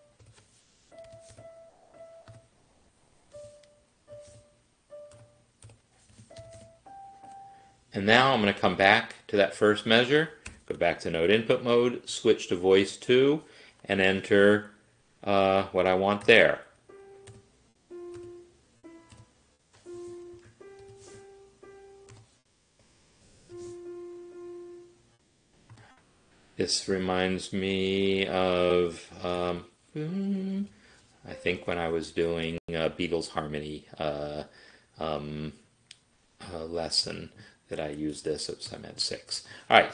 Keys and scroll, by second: 0.0-7.1 typing, 7.3 Escape, 10.5 n, 12.1 ctrl+alt+2, 16.3-24.1 typing, 25.7 typing, 29.4 g, 30.6 c, 31.6 b, 37.1 7, 38.2 ctrl+z, 38.7 6, 39.3 Escape.